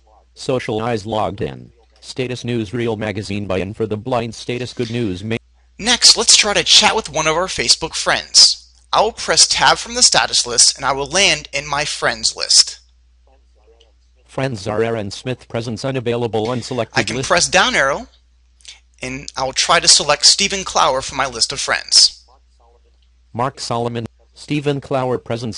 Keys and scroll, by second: 11.4 Tab, 21.0 Down.